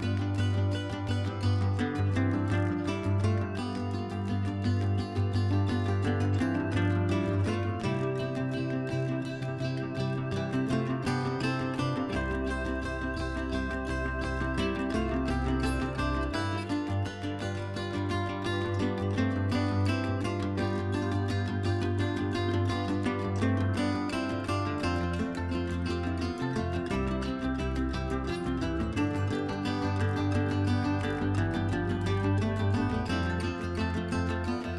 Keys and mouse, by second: 2.2 F4, 2.5 F4, 2.8 middle click, 3.2 click, 3.7 middle click, 5.0 shift+middle click, 6.0 click, 6.6 ctrl+z, 7.2 click, 7.5 ctrl+z, 8.6 ctrl+z, 11.0 click, 12.2 click, 13.9 click, 14.5 ctrl+z, 14.8 middle click, 16.9 click, 17.5 middle click, 18.7 ctrl+z, 19.8 click, 20.5 middle click, 22.2 click, 23.3 click, 23.9 click, 24.4 click, 24.6 click, 24.8 click, 25.2 click, 25.4 click, 26.6 click, 27.2 middle click, 27.8 click, 28.0 click, 29.9 click, 30.5 click, 30.8 click, 31.2 click, 31.4 click, 31.6 click, 32.0 middle click, 32.6 KP_Divide.